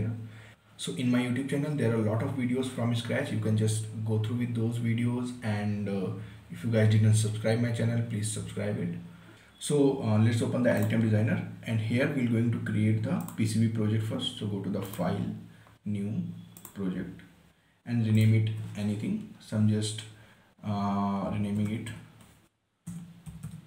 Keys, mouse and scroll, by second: 11.1 click, 13.5 click, 21.7-23.6 typing.